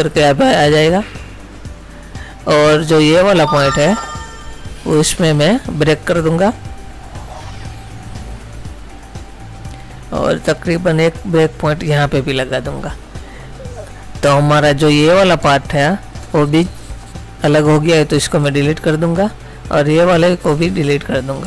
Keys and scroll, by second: 14.4 space, 18.6 Delete, 20.7 Delete.